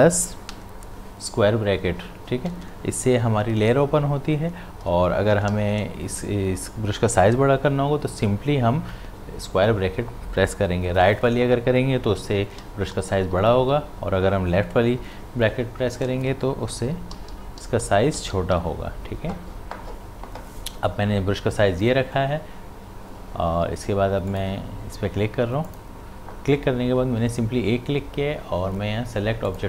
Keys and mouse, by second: 1.4 ctrl+], 5.5 ctrl+z, 12.2-13.7 typing, 15.8-18.6 typing, 24.3 click, 29.5 click.